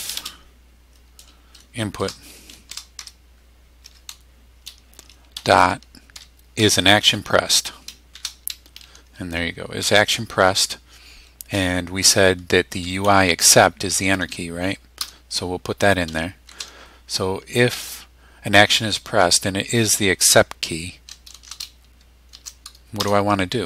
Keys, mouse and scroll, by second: 0.0-0.2 typing, 2.0 shift+9, 2.7 shift+i, 3.0 shift+n, 3.8 Tab, 5.3 ., 6.1 i, 6.6 s, 8.1 shift+-, 9.8 Tab, 12.7 Down, 13.0 Up, 15.0 Return, 16.4 shift+0, 21.3 shift+0, 22.3 shift+;, 23.5 Return.